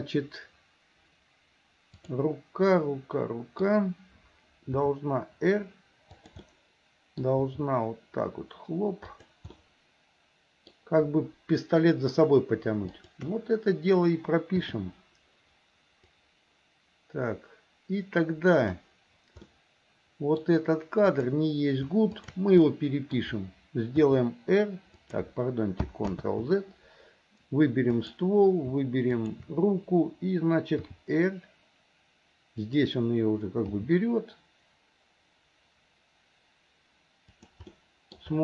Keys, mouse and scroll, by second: 2.0 click, 2.8 middle click, 4.8 r, 6.5 middle click, 7.5 r, 9.6-10.7 middle drag, 12.9 shift+click, 14.7 i, 16.2-18.9 drag, 19.5 middle click, 21.1 click, 22.1 shift+click, 22.7 middle click, 24.1 r, 26.2 ctrl+z, 27.9 click, 29.1 shift+click, 30.9 r, 33.8 g, 37.7 middle click.